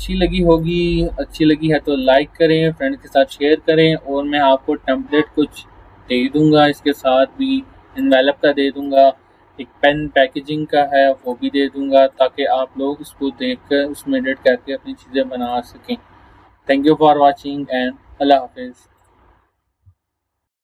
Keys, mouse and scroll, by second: 8.0 click, 11.3 click, 15.5 click, 19.0 click.